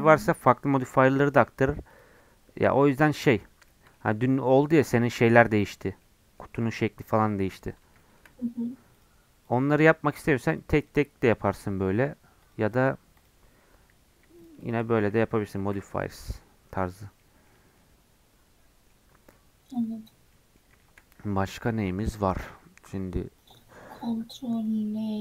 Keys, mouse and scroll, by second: 1.5 middle click, 1.9-3.3 drag, 3.3-7.5 middle drag, 7.5-8.0 scroll down 2, 8.0 shift+middle click, 8.3-8.9 scroll up 4, 8.9-11.9 drag, 11.9 middle click, 12.4-13.7 drag, 13.7-14.3 scroll down 2, 14.4-15.6 shift+drag, 15.6 ctrl+m, 16.8 click, 17.0 scroll down 1, 17.2 middle click, 17.6 scroll up 6, 17.8-19.0 middle drag, 19.0-19.3 scroll down 2, 19.3 middle click, 20.1 scroll down 1, 20.3 middle click, 21.2-23.4 scroll up 2, 23.4-25.2 drag.